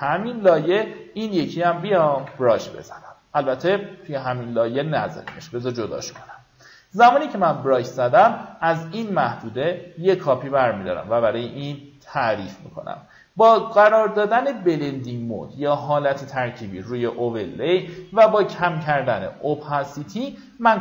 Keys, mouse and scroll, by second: 0.0-1.6 drag, 1.8 ctrl+d, 5.7 ctrl+d, 8.0 ctrl+click, 8.7-20.8 drag.